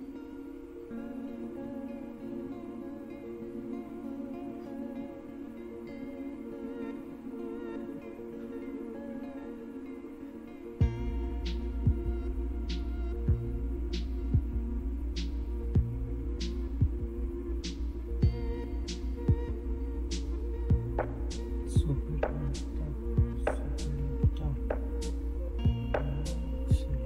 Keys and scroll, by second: 24.4 alt+super+Tab.